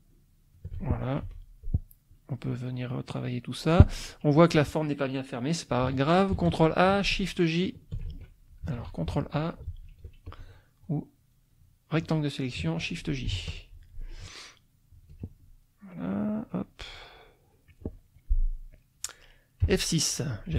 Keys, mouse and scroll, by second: 1.3 F2, 2.1 click, 3.2 click, 6.3 ctrl+a, 7.9 shift+j, 8.7 ctrl+z, 9.3 ctrl+a, 10.2-11.5 ctrl+drag, 13.3 shift+j, 14.9 ctrl+click, 15.6 ctrl+middle click, 16.9 click, 17.7 middle click, 18.1-19.2 scroll up 1, 19.6 F6, 19.8 middle click.